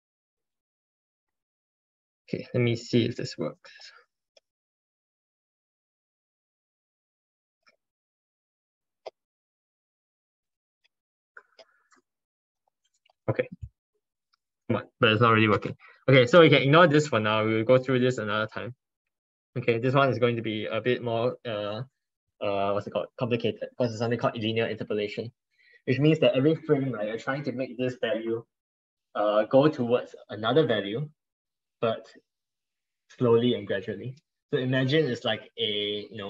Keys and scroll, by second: 19.6 alt+Tab, 21.1 alt+Tab.